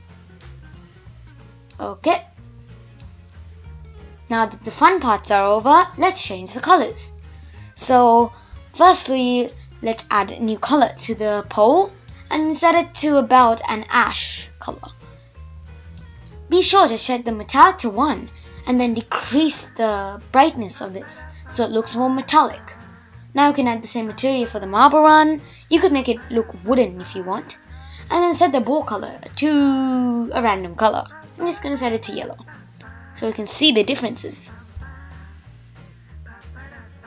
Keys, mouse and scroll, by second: 0.0 scroll down 1, 0.2-1.2 middle drag, 1.2 shift+Left, 4.5 click, 5.6 click, 8.1 click, 8.8-11.9 drag, 12.2 click, 15.1-16.6 scroll down 6, 16.6-19.1 drag, 20.7-22.0 middle drag, 22.0 click, 24.6 drag, 24.8-26.1 middle drag, 26.1 click, 27.1-28.1 drag, 32.2-33.2 scroll down 3, 33.2-35.4 scroll down 4, 35.4-36.3 drag, 36.3-37.0 scroll down 5.